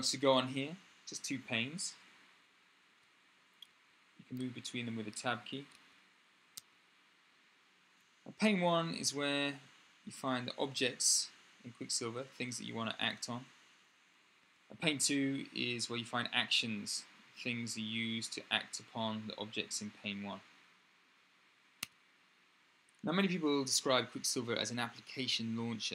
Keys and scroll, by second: 2.6 Tab, 3.4 Tab, 4.1 Tab, 4.9 Tab, 5.5 Tab, 6.3 Tab, 14.2 Tab, 21.6 Tab.